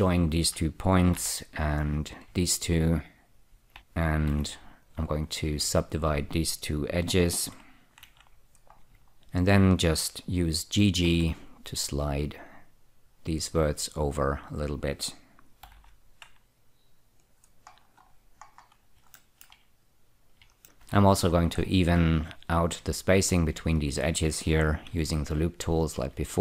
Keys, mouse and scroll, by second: 0.6 shift+click, 0.9 click, 1.4 j, 2.3 click, 3.0 shift+click, 3.7 j, 4.6 2, 5.1 click, 6.2 shift+click, 8.3 <, 9.1 scroll up 1, 9.1 z, 9.8 click, 11.4 g, 11.5 g, 14.1 click, 15.1 click, 16.0 g, 16.1 g, 17.5 click, 18.0-19.3 scroll down 9, 19.5 shift+middle click, 19.9 middle click, 21.1 2, 21.6-22.5 scroll up 2, 22.5 click, 23.6 ctrl+click, 24.0 click, 25.2 ü, 26.0 click.